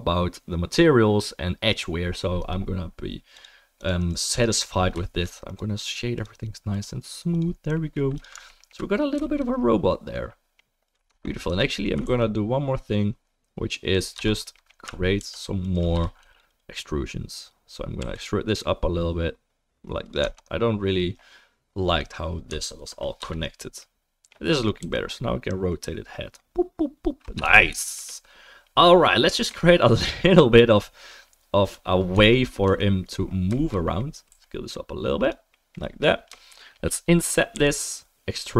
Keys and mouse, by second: 5.4 click, 5.4 middle click, 6.7 click, 6.7 middle click, 7.4-8.4 drag, 8.4 alt+right click, 8.6 alt+drag, 8.6-9.2 alt+right drag, 9.2-12.2 shift+middle drag, 11.1 Tab, 11.4 3, 12.0 ctrl+r, 12.2-16.2 drag, 15.2 ctrl+r, 16.2-22.9 right drag, 16.2 3, 16.3 click, 16.3 middle click, 18.0 e, 20.2 Tab, 21.9 click, 21.9 middle click, 22.7 ctrl+s, 23.2 ctrl+s, 23.2-27.7 right drag, 24.8 r, 27.7-31.6 shift+middle drag, 31.6 click, 31.7-33.1 middle drag, 32.1 Tab, 32.6 3, 33.1-36.5 right drag, 34.3 s, 36.5-38.5 drag, 37.5 i.